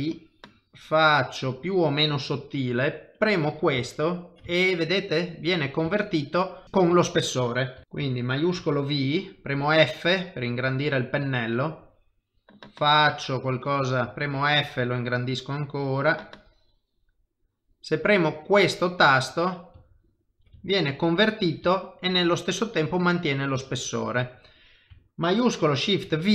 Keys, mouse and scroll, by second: 3.2 click, 3.8 ctrl+middle click, 4.5 shift+middle click, 5.9 ctrl+middle click, 7.0 shift+middle click, 7.8 ctrl+middle click, 8.6 shift+v, 9.5 f, 11.6 click, 14.2 f, 15.7 click, 19.2 middle click, 19.9 ctrl+middle click, 20.6 shift+middle click, 21.7 ctrl+middle click, 23.6 middle click, 26.0 ctrl+shift+v.